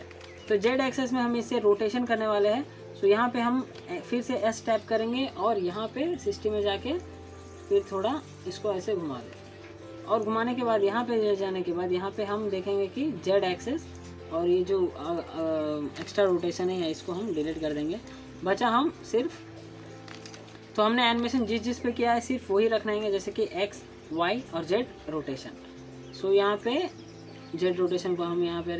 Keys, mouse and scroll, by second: 2.0-2.6 middle drag, 2.7 ctrl+z, 3.1-3.7 scroll down 2, 3.7-4.3 alt+middle drag, 5.0 click, 5.0-5.6 click, 6.3 s, 7.3-8.2 click, 8.6 alt+scroll up 1, 8.8 alt+middle click, 9.9-11.8 drag, 11.9 alt+scroll down 1, 12.2 alt+middle click, 13.4 click, 15.1-15.7 scroll down 2, 15.7-16.2 alt+scroll up 1, 17.0-18.0 drag.